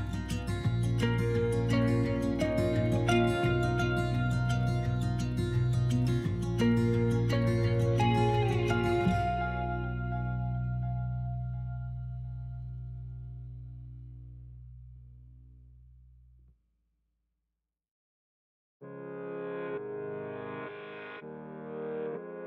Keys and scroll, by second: 3.5 alt+e, 5.6 s, 8.0 s, 15.1 ctrl+z.